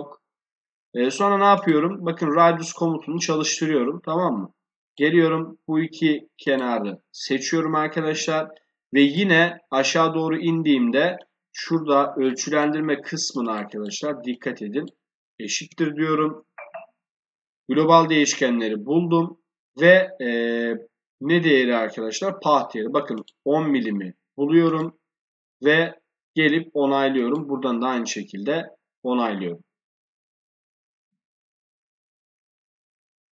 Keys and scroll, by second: 15.9 shift+0.